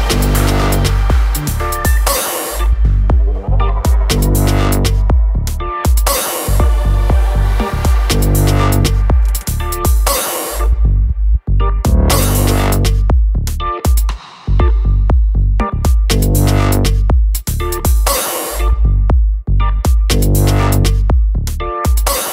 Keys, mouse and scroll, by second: 0.9 click, 2.2 t, 2.7 click, 6.2-7.0 scroll up 1, 7.0-7.8 scroll down 1, 7.8 click, 8.7-10.1 scroll up 1, 10.1 click, 11.2 Down, 11.5 Left, 12.6 Right, 12.8 Up, 18.2 o, 20.4 click, 21.7 ctrl+click, 22.1 ctrl+click.